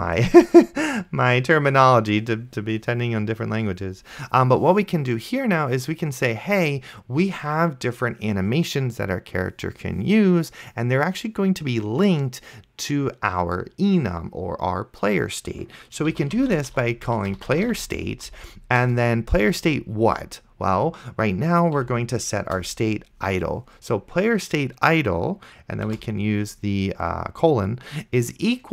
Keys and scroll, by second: 16.1-18.3 typing, 21.8 Down, 22.5 Return, 26.2 shift+;.